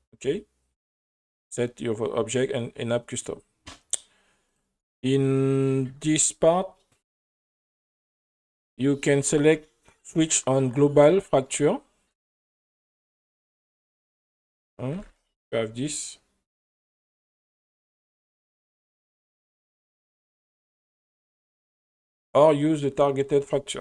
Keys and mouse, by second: 4.5 click, 7.1 click, 10.0-11.3 drag, 13.2 space, 13.8 space, 14.9 r, 15.1 r, 18.5 right click, 18.9 g, 21.3-21.6 right drag, 22.1-22.9 drag.